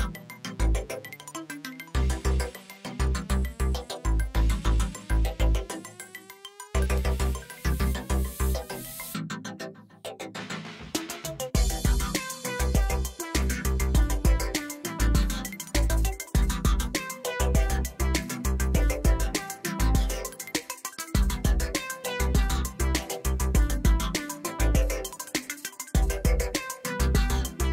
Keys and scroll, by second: 2.0 ctrl+r, 2.9 Return, 3.1 s, 5.2 Escape, 10.2 e, 11.8 ctrl+r, 12.1 Return, 12.8 1, 13.0 shift+z, 13.8 x, 14.4 Tab, 19.2 Tab, 20.1 shift+z, 21.3 shift+z, 21.7 g, 21.8 z, 22.7 Tab, 26.9 alt+a.